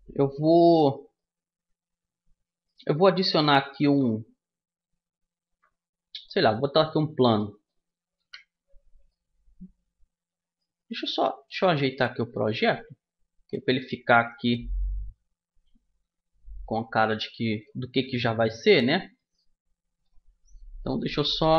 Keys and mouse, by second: 0.3 Tab, 3.5 shift+a, 7.1 middle click, 7.8 KP_1, 10.8-11.9 right drag, 11.9 middle click, 12.7-13.8 drag, 13.8 KP_1, 15.7-17.6 drag, 17.8-19.7 middle drag, 19.7-20.7 right drag, 20.7-21.5 middle drag.